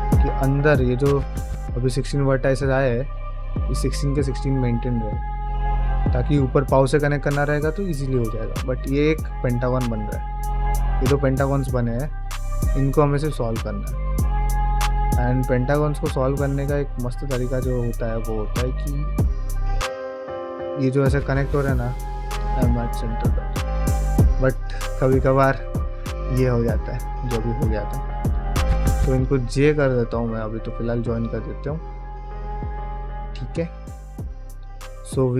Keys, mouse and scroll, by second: 0.4 middle click, 0.7 2, 1.8 alt+click, 2.4 ctrl+middle click, 3.0 shift+middle click, 3.2-4.7 middle drag, 5.0 ctrl+middle click, 5.6 ctrl+middle click, 6.7 middle click, 7.3 middle click, 8.5 3, 8.7 click, 9.8 shift+click, 10.1 middle click, 10.9 x, 12.1 middle click, 12.8 shift+middle click, 13.4 middle click, 14.5 1, 15.1 click, 15.3 g, 16.9 middle click, 17.4 click, 17.6 g, 18.0 middle click, 19.3 middle click, 20.2 click, 20.5 shift+click, 22.2 m, 23.0 middle click, 24.1 ctrl+z, 25.2 middle click, 26.4-27.9 middle drag, 29.1 j, 29.4 middle click, 29.8 click, 30.0 g, 30.4 middle click, 30.9 click, 31.0 g, 31.4 middle click, 32.0-34.5 middle drag.